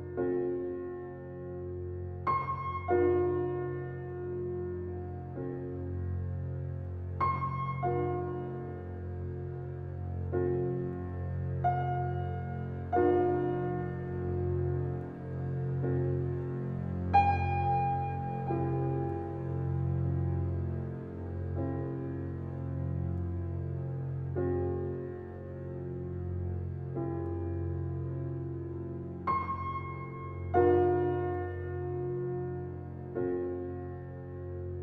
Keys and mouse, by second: 1.7-2.4 typing, 1.9 click, 2.4 ctrl+alt+click, 3.1 alt+a, 3.5-4.2 alt+drag, 4.6-7.8 alt+drag, 8.2 1, 8.9 shift+middle click, 9.0-9.7 shift+drag, 10.2-10.9 typing, 12.1-13.1 drag, 12.8-13.2 typing, 14.1-15.1 drag, 14.9 alt+a, 15.6-16.7 drag, 16.7 typing, 17.2 ctrl+alt+click, 17.8 ctrl+alt+click, 18.5 alt+shift+click, 19.4 ctrl+s, 19.9 alt+click, 21.9 click, 23.1 click, 25.0-26.1 drag, 27.0-27.7 drag, 27.8 click, 31.0 click, 33.4 click, 34.2 click.